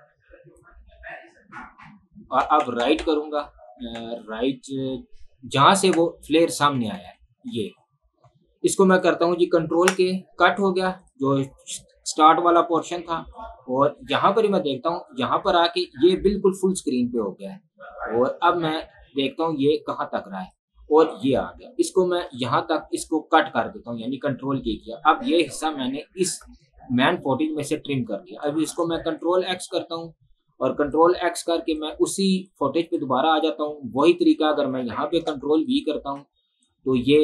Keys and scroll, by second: 2.5 Right, 6.3 Left, 9.8 ctrl+k, 12.9 Delete, 22.3 ctrl+k, 28.8 ctrl+x, 35.6 ctrl+v.